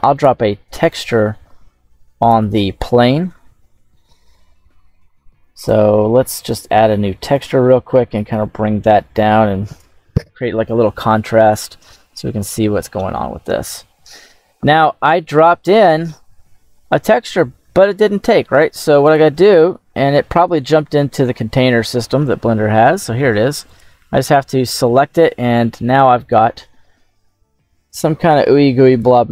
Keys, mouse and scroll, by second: 0.0 click, 2.1 click, 5.5-6.5 drag, 7.2 click, 12.3-13.1 right drag, 13.1 scroll up 3, 15.0-15.6 shift+middle drag, 18.9-23.8 drag, 24.9-25.5 scroll up 4, 28.8-29.3 drag.